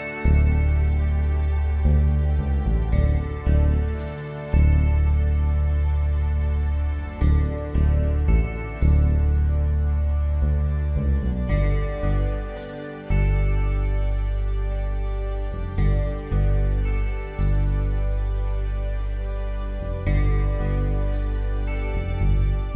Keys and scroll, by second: 12.0 ctrl+t, 19.5 Return.